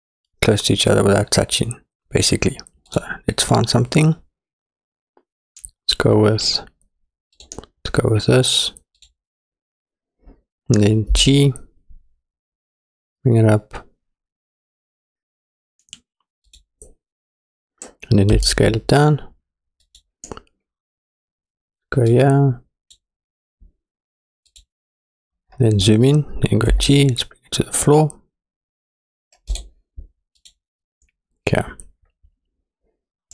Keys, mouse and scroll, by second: 3.0-7.4 drag, 9.0 click, 11.2 g, 18.4 s, 22.1 click, 24.5 click, 25.5-26.0 scroll up 5, 26.7 g, 30.4 click.